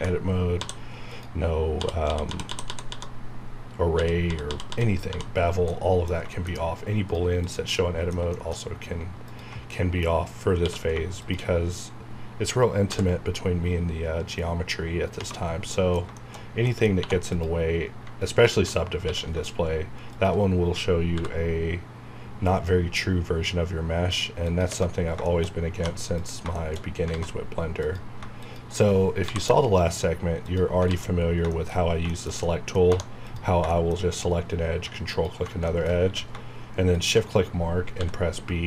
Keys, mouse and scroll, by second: 0.0-0.5 typing, 1.1 click, 1.8-5.0 typing, 5.4 scroll down 1, 5.7 middle click, 7.0 click, 7.0 scroll up 1, 7.8 middle click, 8.6 scroll up 1, 9.2 ctrl+click, 9.7 middle click, 10.6 q, 11.2 shift+click, 12.9 b, 15.2 space, 15.5 scroll down 1, 15.7 middle click, 16.7 middle click, 16.9 scroll up 1, 17.0 2, 17.3 click, 19.0 q, 20.1 shift+click, 21.1 b, 24.5 click, 25.1 space, 25.3 shift+middle click, 25.5 scroll up 1, 26.1 click, 26.6 shift+middle click, 26.8 scroll up 1, 27.1 alt+z, 27.8 click, 29.2 m, 30.4 click, 30.9 alt+z, 31.4 scroll down 1, 31.5 shift+middle click, 32.0 scroll down 1, 32.1 shift+middle click, 32.9 2, 33.2 click, 33.7 shift+middle click, 35.1 ctrl+click, 35.7 shift+middle click, 36.1 q, 37.0 shift+click, 38.0 b.